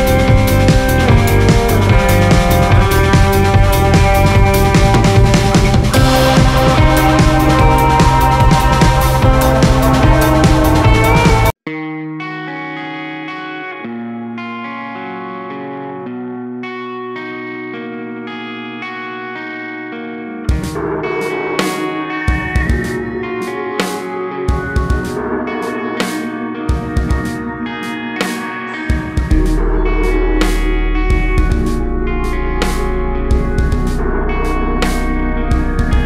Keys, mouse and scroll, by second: 2.3 click, 3.2 click, 5.2-5.6 drag, 9.1-10.3 drag, 10.8-13.4 drag, 13.8 click, 15.9 click, 18.9-20.1 drag, 21.6 click, 23.1 click, 23.6 click, 24.4 shift+d, 28.0-32.9 drag.